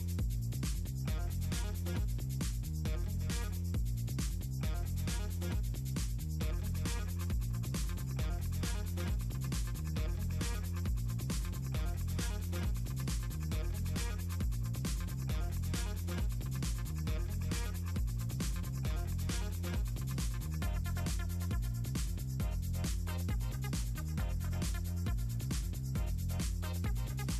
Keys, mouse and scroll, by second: 0.4 click, 0.6 middle click, 0.8 click, 1.1 click, 1.3 click, 1.9 click, 2.4 click, 2.6 click, 2.8 click, 3.1 middle click, 3.2-3.8 ctrl+scroll down 4, 3.4 middle click, 3.8 middle click, 5.5 middle click, 7.2 click, 7.5 click, 8.4 ctrl+scroll up 2, 8.6 middle click, 8.8 ctrl+click, 9.0 ctrl+click, 9.4 click, 9.6 click, 10.0 click, 10.6 click, 12.2 click, 13.0 middle click, 13.8 middle click, 13.9 click, 14.3 ctrl+click, 14.4 middle click, 14.7 click, 14.8 middle click, 14.9 Delete, 15.0 click, 15.3 click, 15.6 click, 15.8 click, 16.0 click, 16.4 click, 17.0 ctrl+scroll up 2, 17.5 click, 17.8 middle click, 18.2 click, 18.4 click, 18.7 click, 18.8 middle click, 19.1 click, 19.4 click, 19.6 click, 19.9 middle click, 20.2 middle click, 20.3 middle click, 20.5 click, 21.0 middle click, 21.1 middle click, 21.2 click, 21.7 click, 22.2 ctrl+scroll up 2, 22.4 click, 22.6 click, 23.6 click, 23.9 click, 24.2 click, 24.4 middle click, 24.5 click, 25.0 middle click, 25.1 click, 25.3 click, 25.6 middle click, 25.7 click, 26.0 click, 26.4 click, 26.6 click, 27.0 click.